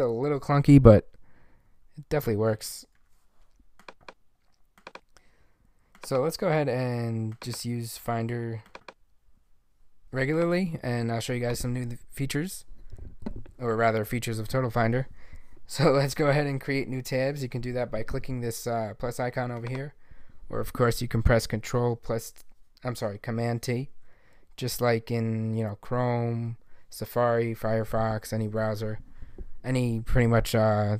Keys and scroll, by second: 0.8 alt+`, 1.8 alt+`, 2.2 alt+`, 2.9 alt+`, 23.9 super+t.